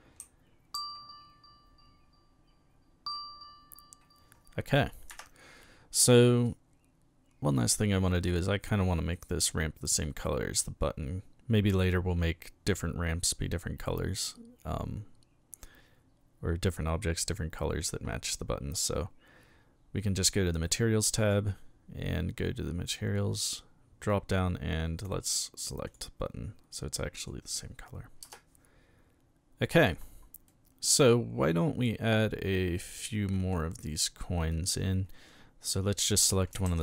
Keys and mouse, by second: 0.0-0.7 typing, 5.1 Escape, 6.4-7.6 middle drag, 9.1 right click, 17.2 click, 21.2 click, 25.9 click, 26.9-27.3 middle drag, 30.5-33.5 middle drag, 33.9 right click, 36.7 shift+d.